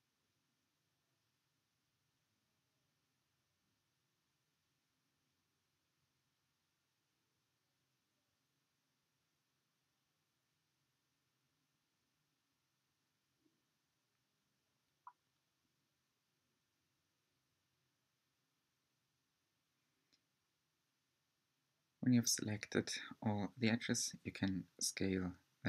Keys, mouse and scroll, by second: 4.1-4.5 scroll up 2, 4.5-5.7 shift+middle drag, 5.7 shift+click, 6.3-7.9 shift+middle drag, 7.9 shift+click, 8.4 shift+click, 8.9-13.4 middle drag, 13.4 shift+click, 16.6 click, 18.5 click, 19.5-20.2 scroll up 5, 20.2-22.5 shift+middle drag, 22.5 s.